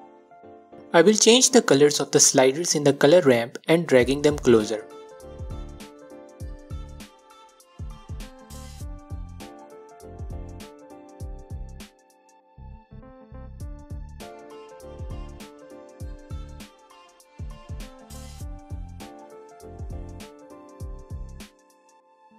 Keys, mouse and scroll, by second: 1.2 click, 2.8 click, 12.3 click, 22.2-22.3 drag.